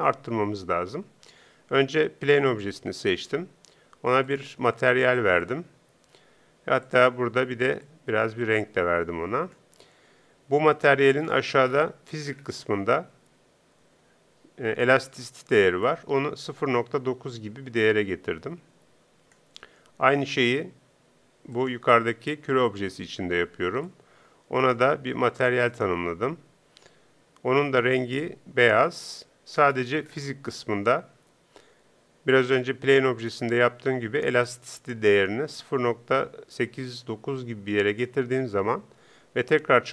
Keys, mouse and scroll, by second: 2.2-4.1 right drag, 5.5-17.8 drag, 21.5-23.5 right drag, 23.9-27.2 drag, 34.5-36.4 drag.